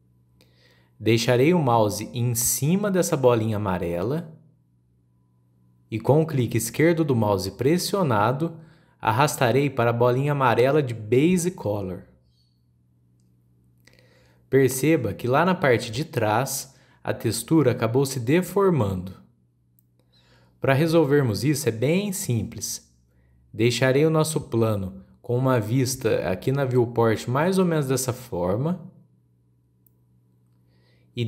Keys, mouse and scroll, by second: 1.3-4.4 shift+middle drag, 5.8 click, 14.6 scroll down 2, 14.9-15.4 middle drag, 15.4-16.8 scroll up 2, 16.8 click, 17.4 scroll up 2, 17.8 shift+middle click, 18.4-19.5 scroll up 3, 19.5-21.9 shift+middle drag, 21.9-23.1 drag, 23.1-23.4 scroll down 3, 23.5-24.9 shift+middle drag, 24.9 click, 25.6-26.1 scroll down 9, 26.4-27.1 middle drag, 27.1-27.4 scroll up 4, 27.4-27.8 shift+middle drag, 27.8 scroll down 1, 28.0-31.2 middle drag.